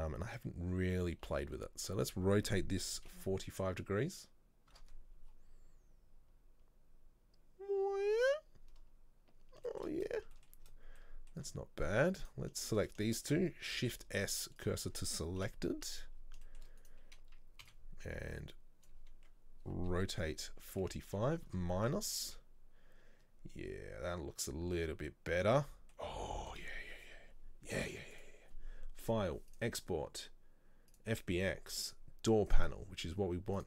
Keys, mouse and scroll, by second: 5.3-6.8 scroll down 1, 9.7 shift+middle click, 10.0-10.4 scroll up 1, 10.4 shift+middle click, 10.7-11.0 scroll up 1, 11.0-12.3 middle drag, 12.3 right click, 12.7 shift+right click, 14.7 shift+s, 15.5 KP_7, 15.9 scroll down 1, 16.5 shift+middle click, 16.9 right click, 18.9 b, 22.0 scroll down 1, 22.3 Tab, 24.8-31.0 middle drag, 32.7 click.